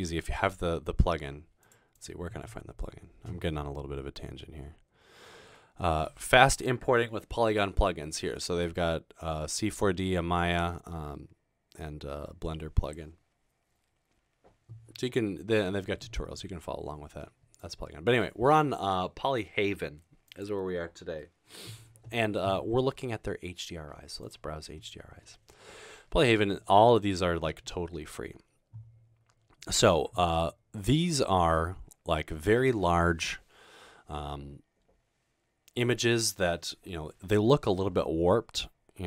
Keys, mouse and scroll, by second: 27.1-29.5 scroll down 3.